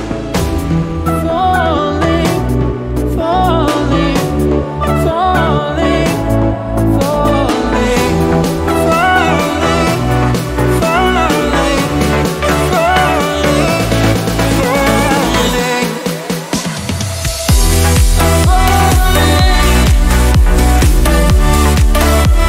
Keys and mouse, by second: 5.7 t, 7.2 ctrl+e, 7.9-11.6 drag, 12.7 t, 13.4 click.